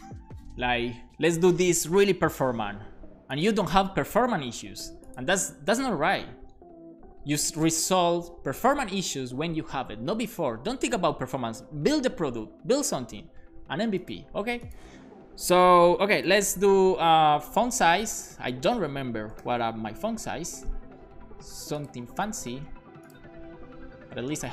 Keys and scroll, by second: 16.4 typing, 18.3 Return, 19.1-20.0 typing, 22.1 super+s.